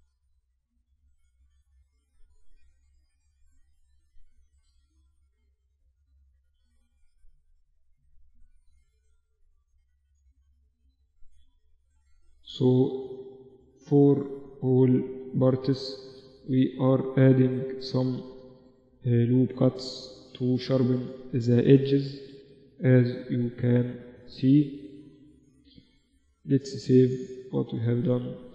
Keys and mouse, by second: 0.6 ctrl+r, 2.0 ctrl+r, 6.2 ctrl+r, 7.7 ctrl+r, 9.4 ctrl+r, 10.3 ctrl+r, 12.1 ctrl+r, 13.4 ctrl+r, 14.7 ctrl+r, 15.7 ctrl+r, 17.1 ctrl+r, 19.3 ctrl+r, 20.6 ctrl+r, 21.9 ctrl+r, 23.0 ctrl+r, 24.7 ctrl+r, 25.9 ctrl+s, 27.0 ctrl+r.